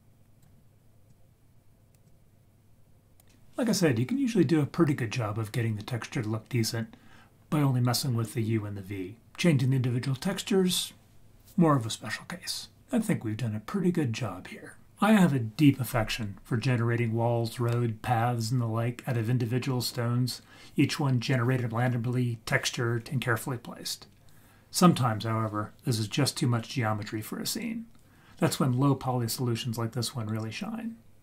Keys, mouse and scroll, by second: 1.1 click, 2.1-3.2 drag.